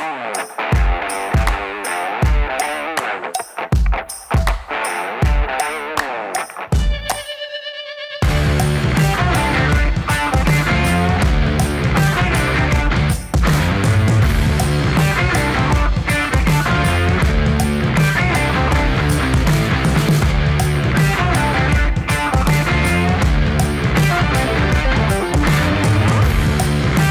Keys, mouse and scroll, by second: 0.4 Right, 0.8 shift+Left, 1.0 shift+Left, 1.2 shift+Left, 1.3 shift+Left, 1.5 shift+Left, 1.7 shift+Left, 1.9 shift+Left, 2.0 shift+Left, 2.6-4.8 typing, 5.0 Return, 5.4 ctrl+d, 7.9 click, 11.9 click, 14.9 space, 16.8-18.5 drag, 18.5-18.9 scroll up 1, 18.9-20.6 middle drag, 20.6 click, 21.3 Page_Down, 24.2 typing, 25.2-27.1 drag.